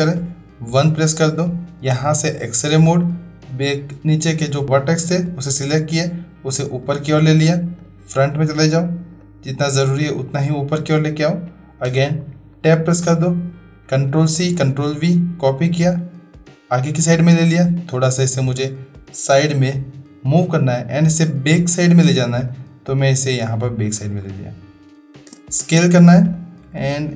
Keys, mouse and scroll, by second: 0.2 1, 2.3 click, 3.0 click, 4.6-6.8 drag, 9.3 click, 11.9 Tab, 12.5-13.2 middle drag, 14.1 ctrl+c, 14.5 ctrl+v, 15.7-16.7 drag, 17.9-20.4 drag, 22.4-23.9 drag, 25.1 space, 26.2-27.1 drag.